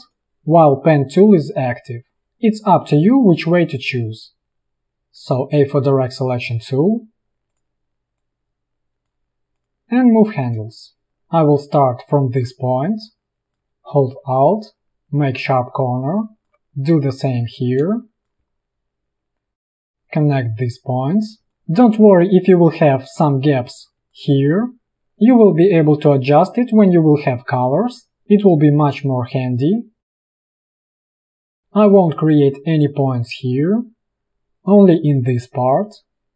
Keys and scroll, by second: 0.1 space, 4.8 a, 10.8 space, 18.0 space, 19.4 space, 21.5 a, 23.9 a, 31.5 space.